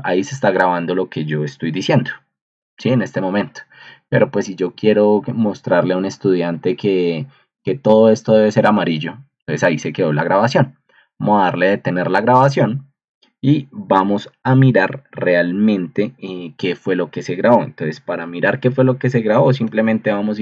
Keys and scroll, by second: 4.5 Escape, 16.2 super+g, 18.1 ctrl+2, 19.2 ctrl+2.